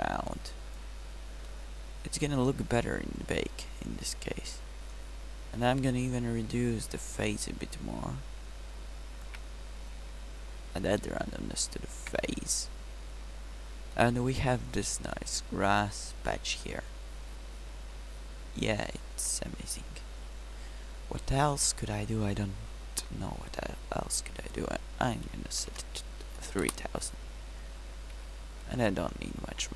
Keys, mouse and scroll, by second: 5.3-7.8 middle drag, 16.2-17.8 middle drag, 26.1 0, 29.6-29.7 middle drag.